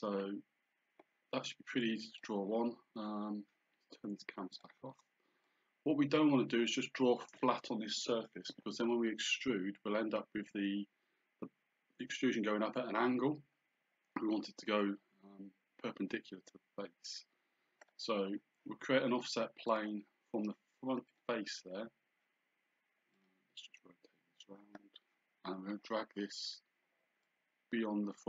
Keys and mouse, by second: 2.2 click, 4.6 click, 17.9 click, 19.7 click, 21.1 click, 23.2 click, 27.3 click.